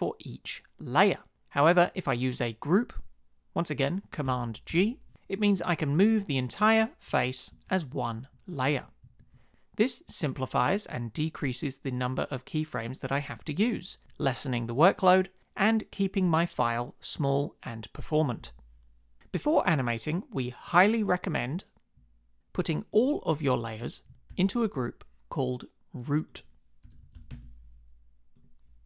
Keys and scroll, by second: 4.7 super+g, 6.6 shift+Up, 7.1 shift+Down, 7.9 shift+Up, 8.3 shift+Right, 8.7 shift+Left, 9.3 shift+Right, 24.3 super+g, 26.6-27.7 typing.